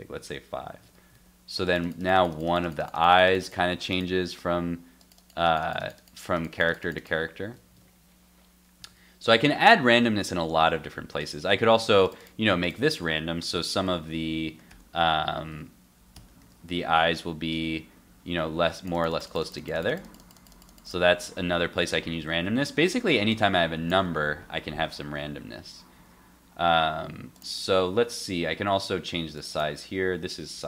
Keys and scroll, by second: 0.2 super+s, 0.8 super+Tab, 1.1 super+r, 7.8 super+Tab, 8.8 super+s, 16.4 super+s, 16.8 super+Tab, 17.1 super+r, 18.3 super+r, 22.2 super+Tab, 25.9 super+s.